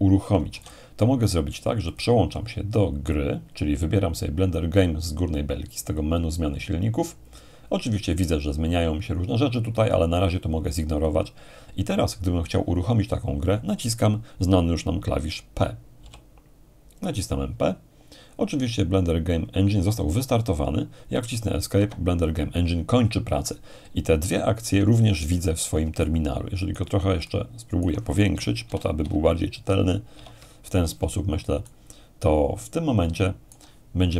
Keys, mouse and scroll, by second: 0.5 x, 0.6-1.7 drag, 1.9-2.9 drag, 6.0-7.1 drag, 16.0 p, 21.8 Escape, 26.0-28.8 alt+right drag, 28.6 ctrl+alt+shift+=, 29.0 ctrl+alt+shift+=, 30.7 =, 31.7-34.1 alt+right drag.